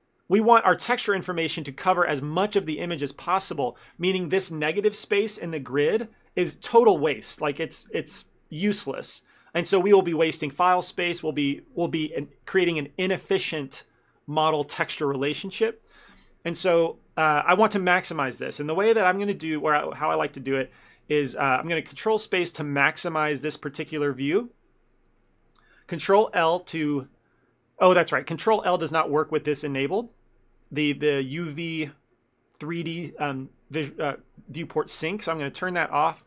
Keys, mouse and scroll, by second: 18.4 click, 18.9 shift+middle click.